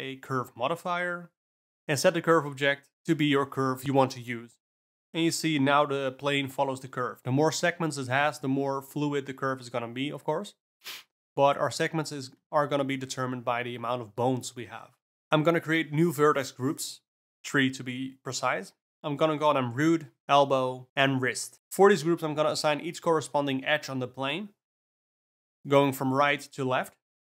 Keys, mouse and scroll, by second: 0.0-2.3 drag, 3.9-4.7 ctrl+middle drag, 4.7 g, 10.1 click, 10.8-11.4 ctrl+middle drag, 11.4 Tab, 12.0 ctrl+middle click, 12.8 Tab, 13.7 Tab, 14.2 click, 17.0 click, 17.7-18.6 drag, 18.7 click, 19.1 o, 20.4 click, 21.6 Tab, 22.8 click, 23.1 click, 23.7 click, 25.3 click, 25.8 click.